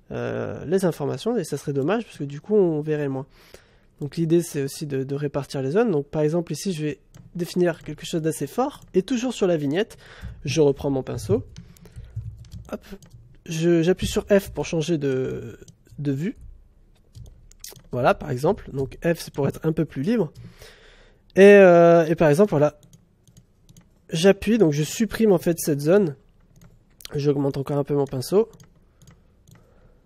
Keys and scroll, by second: 14.0 f, 14.4 space, 16.3 f, 17.1 space, 18.0 f.